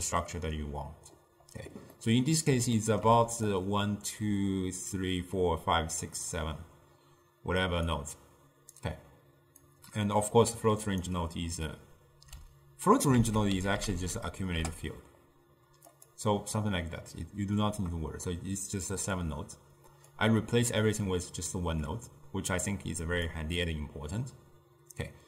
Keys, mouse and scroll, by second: 3.6-4.3 drag, 4.3-5.0 d, 8.0 click, 9.7 click, 13.3 ctrl+a, 14.0 c, 20.2 click.